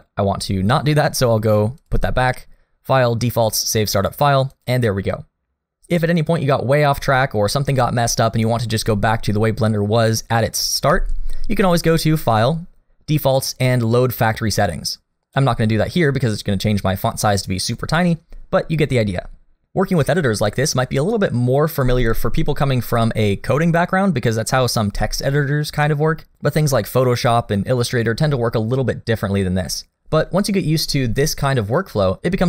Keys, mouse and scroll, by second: 1.8 click, 11.8 click.